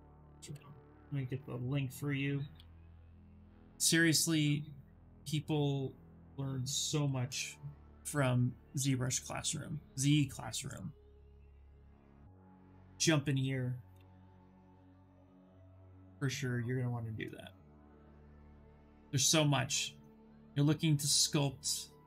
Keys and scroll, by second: 0.0-0.2 typing, 1.3-3.4 typing, 5.7-7.1 typing, 13.6 ctrl+v, 13.6 ctrl+b, 14.7 Return, 16.8 Return.